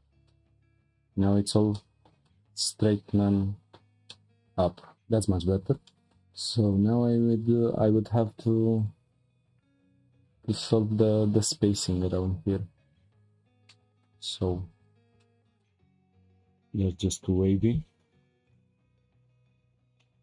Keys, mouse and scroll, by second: 0.0 Tab, 0.2-3.6 middle drag, 3.6-4.1 scroll down 3, 4.1-5.4 middle drag, 5.4-5.9 scroll up 5, 5.9-7.0 shift+middle drag, 7.1-10.2 drag, 13.7-14.7 middle drag, 14.7 Tab, 15.2-15.6 shift+middle drag, 15.6-20.0 right drag, 20.0 middle click.